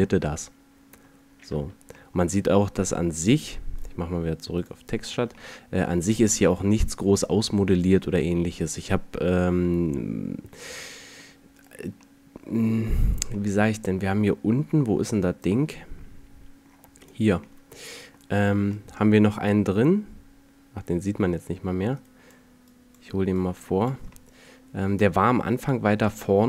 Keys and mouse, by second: 1.3 Tab, 2.8 Tab, 5.1 a, 5.9 a, 10.5-11.7 drag, 11.7-14.5 middle drag, 16.7-17.3 right drag, 22.3-22.7 middle drag, 25.5-26.4 middle drag.